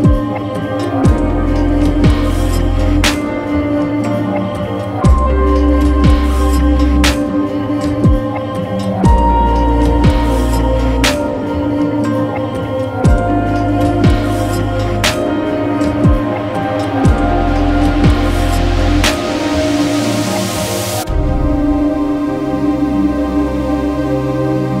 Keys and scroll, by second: 8.6 Home, 8.7 End, 11.9 super+z, 15.7 v, 15.8 space, 17.5 alt+super+2.